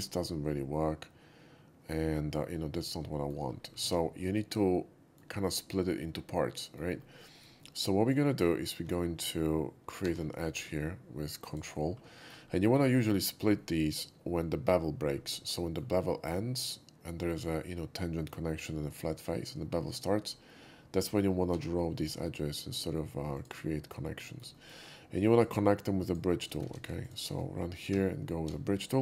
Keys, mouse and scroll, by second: 0.2-2.9 shift+middle drag, 3.2 middle drag, 3.6 middle click, 4.4 ctrl+shift+z, 4.4 middle drag, 4.8-5.2 middle drag, 6.6 shift+middle click, 7.2 shift+middle click, 7.9 middle click, 9.0 ctrl+middle click, 10.1 ctrl+r, 11.5 click, 12.2 shift+middle drag, 12.8 shift+middle drag, 13.3 shift+middle drag, 13.6 shift+middle click, 15.3 shift+scroll down 1, 15.7 shift+middle click, 20.3 middle drag, 21.8 ctrl+r, 23.4 click, 24.3 shift+middle click, 24.6 middle click, 25.4 click, 26.1 shift+click, 27.0 ctrl+shift+z, 27.1 click, 27.9 shift+q, 28.6 shift+q.